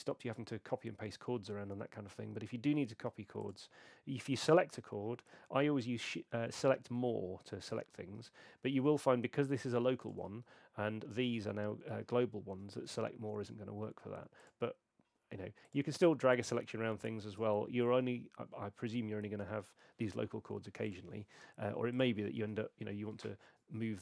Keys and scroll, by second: 6.1 shift+super+a, 6.8 shift+super+a, 8.2 shift+super+a, 8.3 shift+super+a, 8.5 shift+super+a, 8.6 shift+super+a, 10.4 shift+super+a, 22.4 shift+super+a, 22.8 shift+super+a, 23.1 shift+super+a.